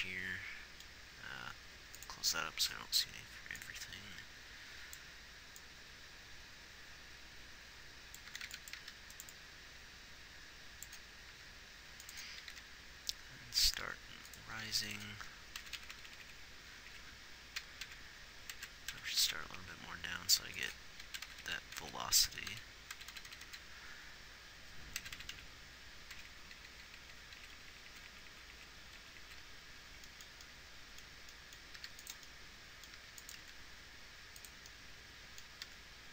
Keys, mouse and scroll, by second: 9.3 g, 9.7-11.0 drag, 11.7 g, 12.8 r, 14.2 r, 15.1 g, 16.0-16.7 Left, 17.4 Left, 18.3 Down, 19.0 Right, 19.3 Right, 20.2 g, 21.5-21.9 Right, 22.2 Right, 22.9-25.8 Right, 26.6-27.6 Left, 28.0 Right, 28.1 Right, 28.3 Right, 28.5 Right, 28.7 Right, 29.4 Right, 29.7 Right, 32.2 g, 33.4 g, 33.8 r, 36.0 r.